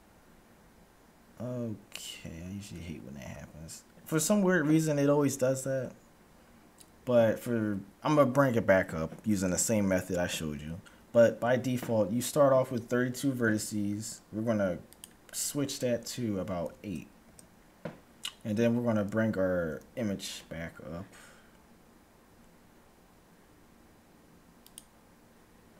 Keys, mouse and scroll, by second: 13.7 F6, 19.7 n, 20.4-23.0 middle drag, 24.5-25.7 drag.